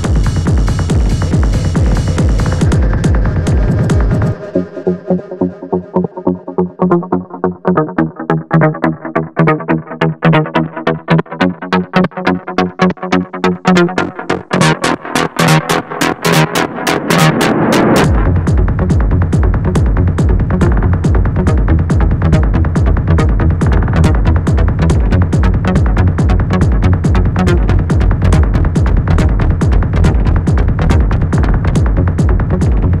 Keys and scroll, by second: 0.7 2, 3.9 4, 7.9 3, 21.0 4, 25.9 3, 29.2 F1, 30.7 1.